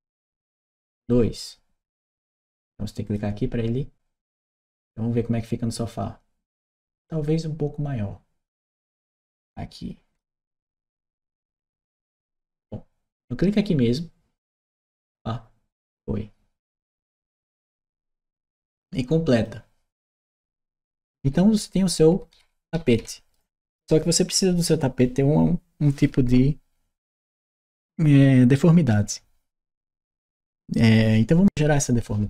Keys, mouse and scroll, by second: 0.0-0.4 typing, 2.9 click, 9.0 click, 11.4 Return, 14.3 click, 19.1 click, 19.8-23.1 right drag, 21.0 w, 22.1 s.